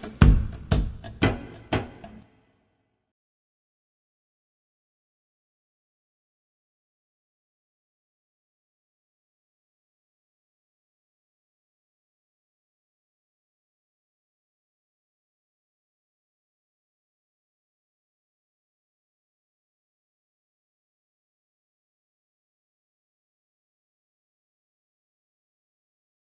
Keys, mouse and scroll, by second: 2.4 alt+", 3.6 BackSpace, 7.4 ctrl+x, 10.2 y, 12.2 Return, 15.1 scroll up 2, 15.8 click, 17.5 scroll up 2, 22.5 click, 24.8 click.